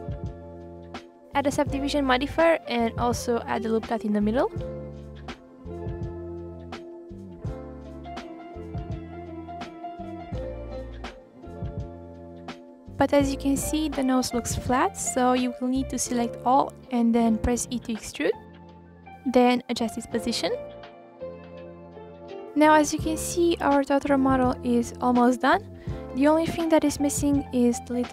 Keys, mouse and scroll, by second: 0.2-2.5 drag, 3.8-4.6 drag, 4.6 ctrl+r, 5.5 click, 6.1 g, 7.5 middle click, 8.2 click, 9.1 click, 10.5 click, 12.0 r, 12.9 middle click, 13.3 scroll down 2, 13.5 scroll up 3, 13.7 middle click, 14.3-14.6 scroll up 1, 14.6 a, 15.0 e, 16.9 ctrl+r, 17.6 scroll down 1, 17.7-19.1 middle drag, 19.1 click, 19.4 scroll down 2, 19.6 middle click, 20.0 click, 21.3-21.9 middle drag, 21.9 KP_1, 22.0 scroll down 4, 22.5 click, 23.2-23.6 scroll down 1, 23.6-23.9 scroll up 3, 23.9-24.6 middle drag, 24.6-25.0 scroll up 1, 25.0 click, 25.8 click, 26.7 KP_3, 26.9 scroll down 2, 27.1-27.5 scroll up 1, 27.5 r.